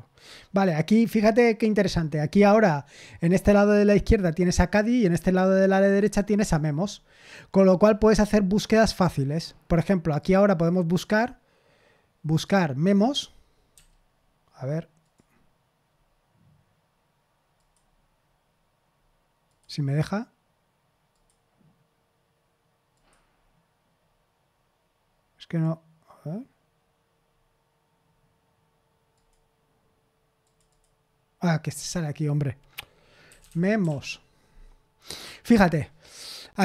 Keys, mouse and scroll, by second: 7.8-8.2 scroll down 1, 8.3-9.3 scroll up 1, 10.2 click, 12.4 click, 13.7 m, 15.0 click, 17.5 click, 19.4 click, 21.1 click, 22.9 click, 29.1 click, 30.4 click, 30.7 click, 31.7 click, 33.0-34.3 typing.